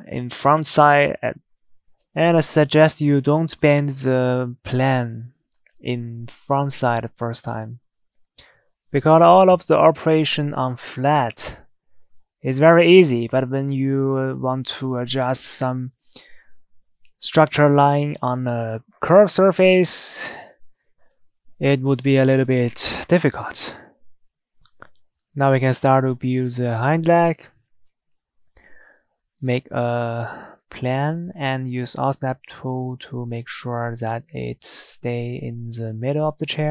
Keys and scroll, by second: 18.5 Tab.